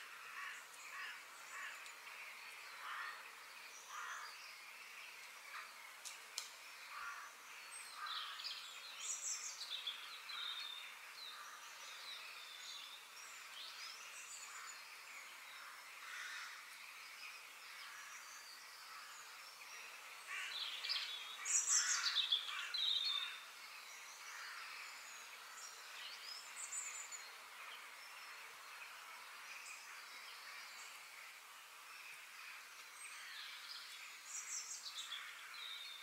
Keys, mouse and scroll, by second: 19.0 middle click, 19.4-21.7 scroll down 8, 25.8-28.2 middle drag, 28.2 scroll down 1, 28.4-30.3 middle drag, 32.0-34.0 middle drag.